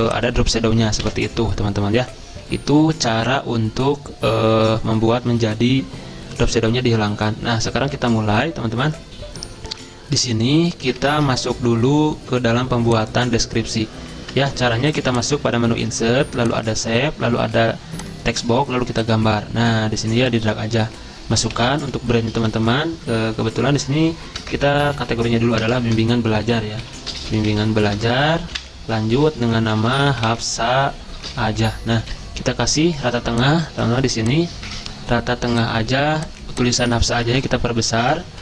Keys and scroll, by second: 1.0 Delete, 10.2 alt+Tab, 10.8 alt+Tab, 11.0 alt+Tab, 21.5 Caps_Lock, 22.3 typing, 24.4-31.9 typing, 32.0 ctrl+a, 37.4 ctrl+], 37.8 ctrl+].